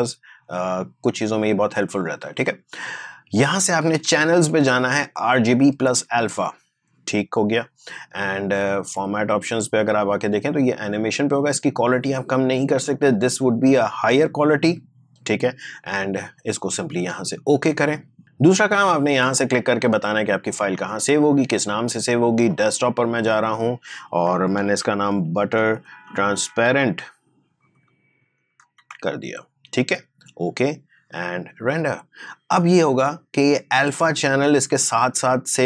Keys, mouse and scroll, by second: 4.1 click, 9.4 click, 14.0 click, 17.6 click, 20.8 click, 24.6 typing, 25.8-27.6 typing, 30.7 click.